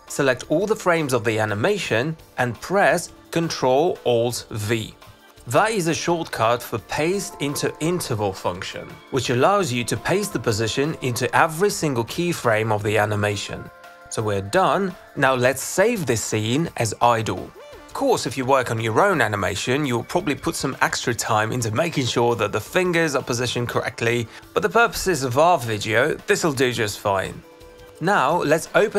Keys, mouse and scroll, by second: 1.3 click, 4.8 ctrl+alt+v, 15.4 click, 15.6 click, 17.0 click, 17.3 click, 17.6 click, 17.7 click, 18.1 click, 21.0 alt+click, 22.5 click, 22.8 click, 23.4 click, 24.5 click, 25.3 click.